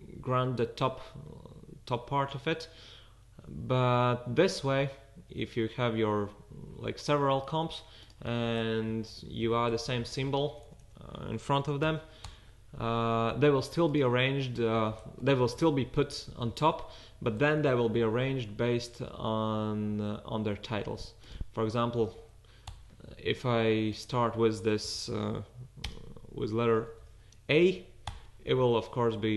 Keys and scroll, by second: 9.4 fn+Left, 9.7 Right, 9.9 Right, 10.4 Right, 10.4 BackSpace, 10.7 BackSpace, 10.8 BackSpace, 11.6 shift+fn+Left, 15.6 fn+Left, 15.8 Right, 16.0 Right, 16.3 Left, 16.5 space, 24.8 fn+Left, 25.8 space, 26.8 shift+a, 27.7 space.